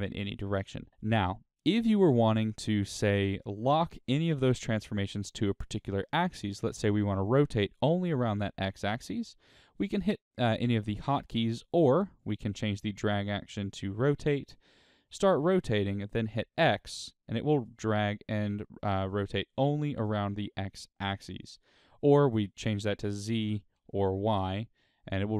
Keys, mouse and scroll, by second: 8.0 r, 11.1 right click, 12.1-14.9 drag.